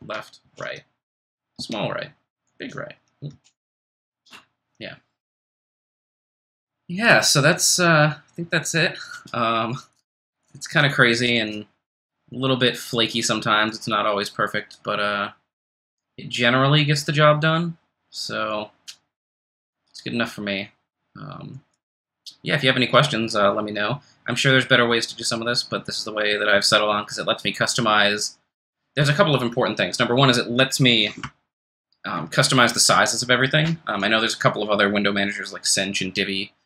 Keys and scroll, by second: 0.0 ctrl+shift+super+b, 0.4 ctrl+shift+super+,, 1.6 ctrl+shift+super+l, 2.5 ctrl+shift+super+., 3.3 ctrl+shift+super+,.